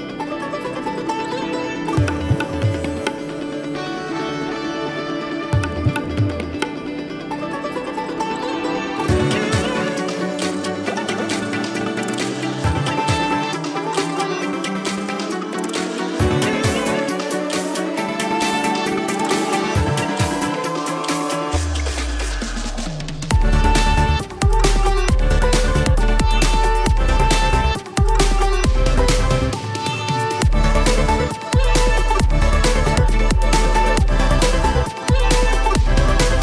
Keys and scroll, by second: 0.3 ctrl+z, 1.4 space, 8.2 space, 15.0 space, 17.1 space, 25.1 space, 28.4 ], 29.8 ], 30.0 space, 31.7 ], 35.3 space.